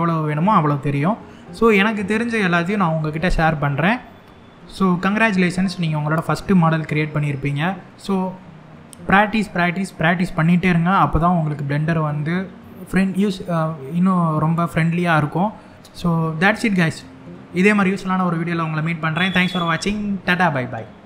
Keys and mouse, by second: 7.0-7.5 shift+middle drag.